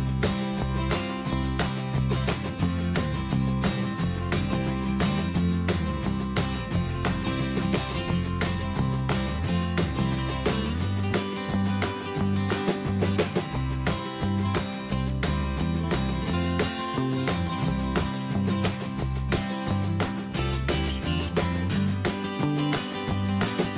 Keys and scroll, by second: 6.8 ctrl+g, 8.4 ctrl+z, 20.7 ctrl+g.